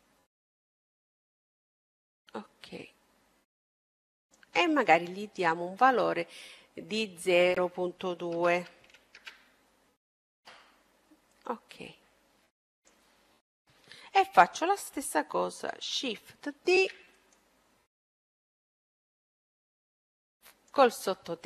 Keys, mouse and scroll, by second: 6.2-8.1 drag, 11.3-13.2 drag, 13.3 middle click, 16.5 shift+d, 18.1-20.0 drag.